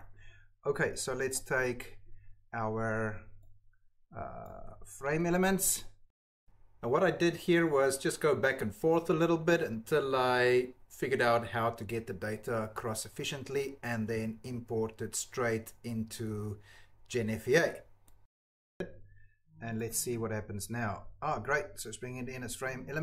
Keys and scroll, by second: 1.4 ctrl+c, 4.4 ctrl+c, 5.1 Tab, 6.4 ctrl+c, 6.7 alt+Tab, 6.9 space, 7.0 BackSpace, 7.1 space, 7.1 o, 7.2 Return, 9.9-10.8 typing, 14.1 ctrl+v, 14.2 Delete, 14.6 Delete, 15.3 shift+o, 15.5 Return, 15.7 BackSpace, 15.8 space, 15.9 Return, 15.9 5, 17.8 alt+Tab, 18.2 ctrl+s, 18.6 ctrl+s.